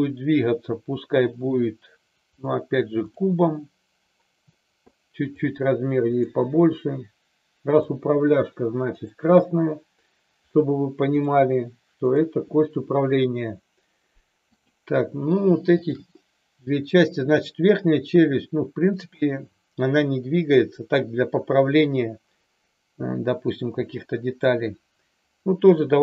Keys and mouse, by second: 5.2 click, 7.6 click, 8.8 click, 11.1 click, 12.0 click, 14.5 click.